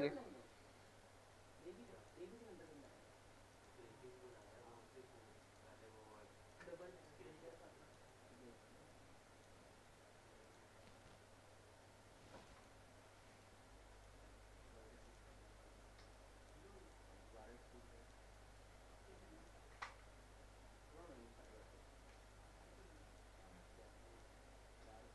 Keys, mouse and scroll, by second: 1.2 middle click, 1.3 scroll down 1, 1.9 middle click, 2.4 scroll down 1, 2.7 middle click, 3.5 click, 4.6 scroll up 1, 5.4 right click, 6.5 click, 6.8 middle click, 7.5 click, 8.1 middle click, 8.6-8.9 scroll up 1, 8.9 click, 12.5 middle click, 12.8 scroll up 1, 13.4 click, 15.5-16.1 scroll up 1, 16.1 click, 18.3 scroll up 1, 18.7 scroll down 1, 19.2 click, 21.6 scroll down 1, 22.1 middle click, 22.6 scroll up 1, 23.0 click.